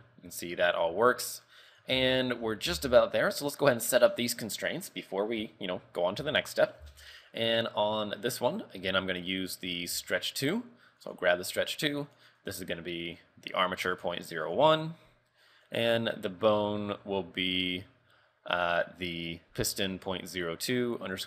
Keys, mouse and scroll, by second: 2.2 shift+middle click, 2.5 scroll up 3, 2.7 z, 3.0 shift+middle click, 3.7 right click, 5.0 scroll down 4, 5.4 z, 6.4 shift+middle click, 6.7 scroll up 3, 6.9 z, 7.2 shift+middle click, 7.6-7.9 scroll up 1, 9.3 click, 9.8 click, 12.1 click, 12.5 click, 15.7 click.